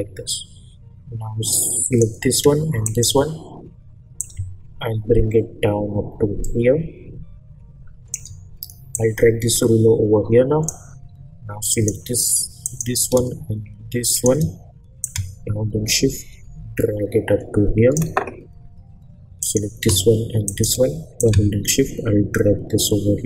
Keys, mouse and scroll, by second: 2.8 shift+click, 4.2-8.9 drag, 8.9-10.8 drag, 14.1-19.4 shift+drag, 20.5 shift+click, 21.2-23.2 drag.